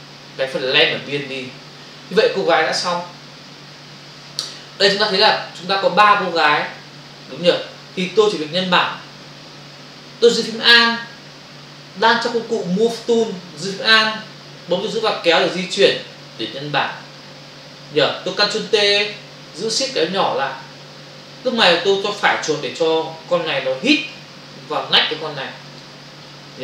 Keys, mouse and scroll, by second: 15.0 alt+click, 19.9 shift+click, 22.3 right click, 25.6 click, 26.5 click.